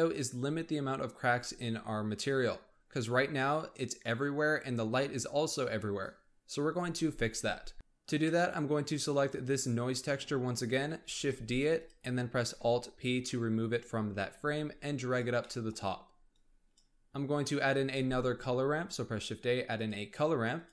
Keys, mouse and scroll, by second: 7.7 click, 8.2-9.2 middle drag, 9.2 click, 11.0 shift+d, 13.1 alt+p, 14.2 g, 15.4 middle click, 15.7-16.2 scroll up 1, 16.2 click, 16.9-17.9 scroll up 1, 17.9 shift+a.